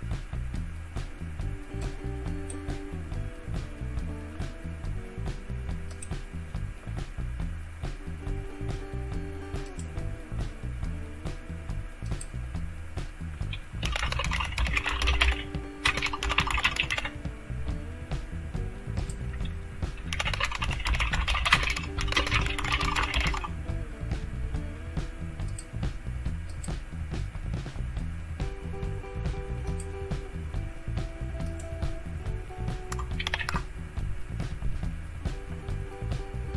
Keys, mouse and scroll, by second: 1.8 click, 5.9 click, 9.7 click, 9.9 click, 12.1 click, 13.6-17.4 typing, 19.0 click, 19.8-23.7 typing, 25.5 click, 26.5 click, 29.7 click, 31.4 click, 33.2 ctrl+h.